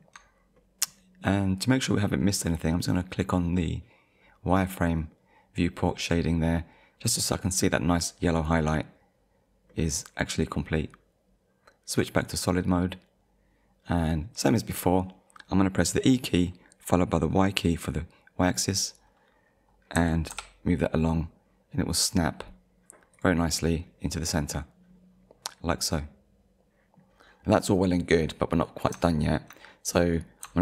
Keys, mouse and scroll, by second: 0.6 middle click, 4.5 click, 6.5 middle click, 9.7 middle click, 10.5-11.0 scroll down 1, 12.0 click, 12.8 middle click, 20.0 e, 20.3 y, 23.1 click, 24.2 middle click, 24.9 scroll up 1, 25.6 scroll down 1, 26.5 shift+middle click, 27.6 middle click, 28.3-28.7 scroll up 1, 29.2 shift+middle click, 30.0 middle click.